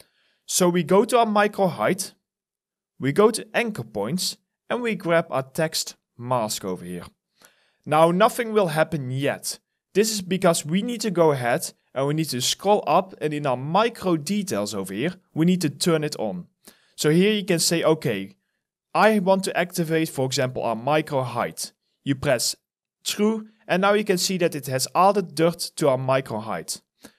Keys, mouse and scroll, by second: 10.2 scroll down 1, 10.9 scroll up 1, 17.5 alt+right click, 18.6 alt+middle click, 23.9 alt+click.